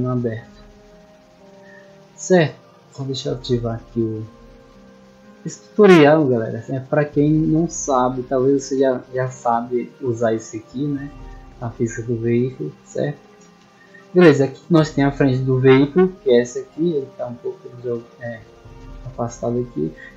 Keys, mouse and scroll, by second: 0.4-0.7 scroll down 2, 3.4 click, 3.7-4.6 scroll down 4, 4.6-5.0 scroll down 1, 5.5 click, 5.8 click, 6.1 middle click, 6.1-6.9 scroll up 2, 10.4-12.0 typing, 13.3 space, 15.3-15.7 middle drag, 16.6 right click, 17.4 click, 19.2-19.9 middle drag.